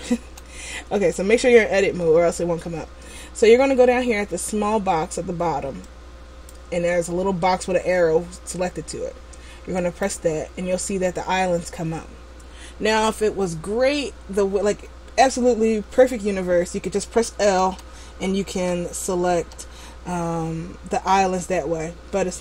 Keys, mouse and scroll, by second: 0.3 a, 6.1 click, 9.9 click, 16.2-17.8 scroll up 1, 17.8 l, 18.6 l.